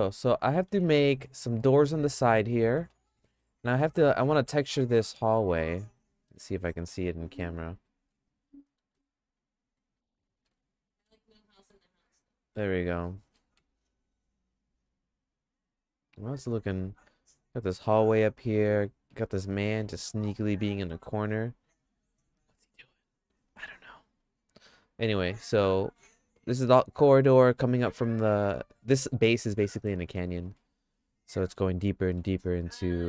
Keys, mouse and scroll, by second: 0.3-2.7 shift+middle drag, 3.0 middle click, 3.5-4.5 shift+middle drag, 5.1 middle click, 6.3 KP_0, 7.8 Home, 8.8 shift+`.